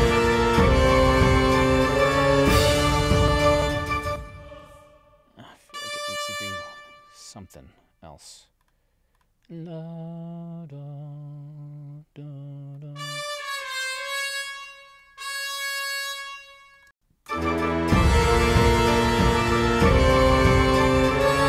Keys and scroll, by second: 4.0 space.